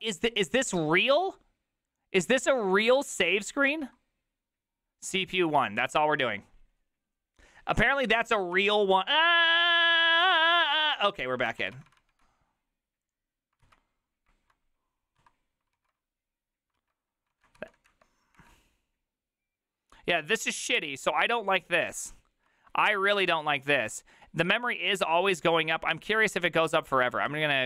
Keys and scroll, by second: 3.7 1, 8.5 alt+q, 11.9 alt+r, 11.9 Right, 12.0 Right, 12.1 Right, 13.6 alt+{, 15.2 Escape, 15.8 alt+(, 16.8 alt+{, 17.3 ctrl+a, 17.6 4, 17.9 Up, 18.3 Return.